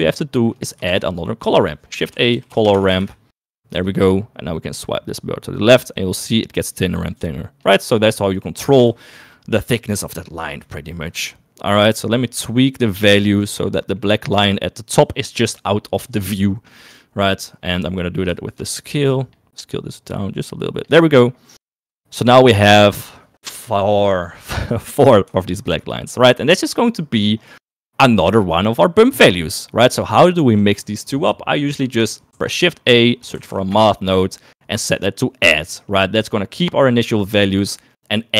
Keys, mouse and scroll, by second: 1.0 shift+a, 3.0 r, 5.0-7.7 drag, 9.4 shift+middle click, 12.6 shift+middle click, 13.6 middle click, 14.0 middle click, 17.4 middle click, 18.8-20.9 shift+drag, 21.7 shift+middle click, 22.3 shift+middle click, 25.4 shift+middle click, 26.5 click, 28.0 click, 32.3 shift+a, 36.2 click, 38.2 click.